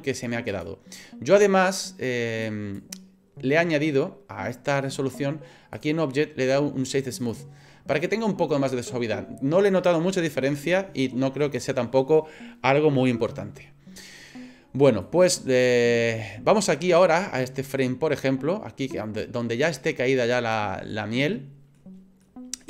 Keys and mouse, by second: 0.5 click, 2.5 click, 5.9-7.4 drag, 15.0-20.6 drag, 20.9 middle click, 22.2 middle click.